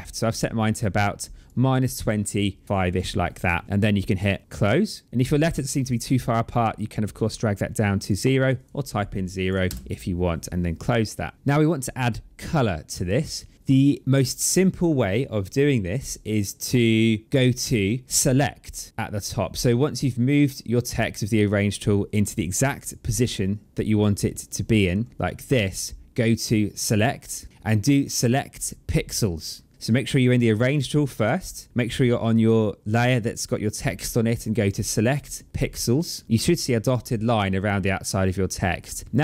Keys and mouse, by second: 5.3 click, 8.3 click, 9.5 KP_0, 10.6 click, 15.8 click, 19.7 click, 21.5 click, 25.2 click, 27.5 click, 28.4 click, 30.2 click, 34.4 click, 35.5 click.